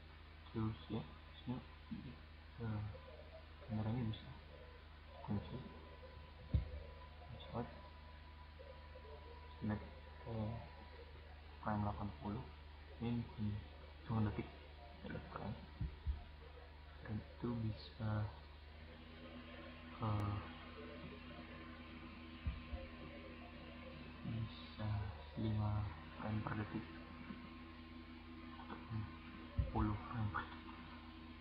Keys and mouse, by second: 0.3-1.1 right drag, 0.9 drag, 4.8-6.4 drag, 9.3-10.8 drag, 18.3-19.1 right drag, 20.9 right click, 25.6-26.4 drag, 27.6-28.6 drag.